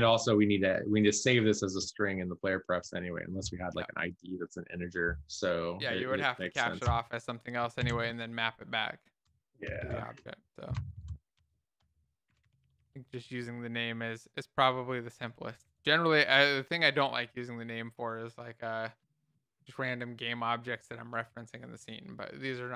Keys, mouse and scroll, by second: 7.4 Return, 8.5 ctrl+s, 8.5 Up, 8.7 Up, 9.2 Down, 11.3 ctrl+shift+Left, 12.7-13.9 typing, 13.9 ctrl+s, 14.0 End, 14.6 Left, 15.2 space, 16.0 ctrl+s, 16.2 Up, 16.7 Down, 17.2 Left, 21.1-22.7 typing.